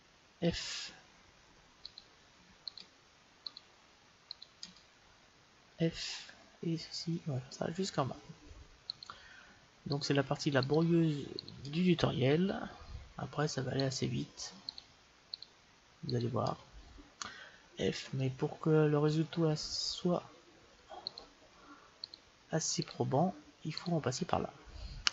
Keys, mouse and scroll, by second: 0.4 f, 1.9-6.1 right drag, 5.6 f, 6.3 middle click, 9.1-13.3 right drag, 12.5 f, 13.8-18.0 right drag, 17.7 f, 18.2-20.1 middle drag, 21.3-25.1 right drag.